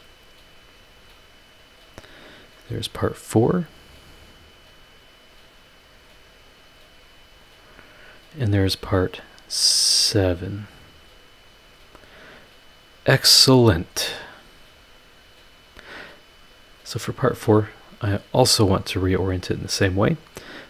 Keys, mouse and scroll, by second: 0.7 click, 2.1 click, 4.3 click, 4.8 click, 6.0 click, 7.1 click, 7.5 click, 10.4 click, 12.0 click, 12.8 click, 15.6 scroll up 1, 16.8 click, 18.8 click.